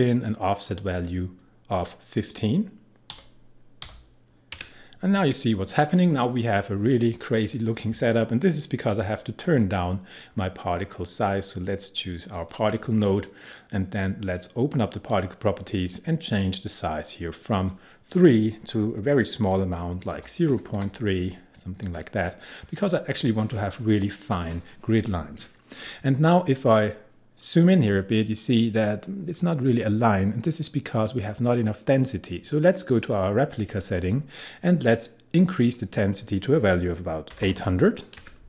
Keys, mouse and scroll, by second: 3.1-3.8 typing, 12.3 click, 15.1 click, 17.5 click, 20.1-21.3 typing, 21.8 click, 27.4-28.2 scroll up 1, 30.3-32.1 scroll down 1, 32.9 click, 35.6 click, 37.1-38.1 typing.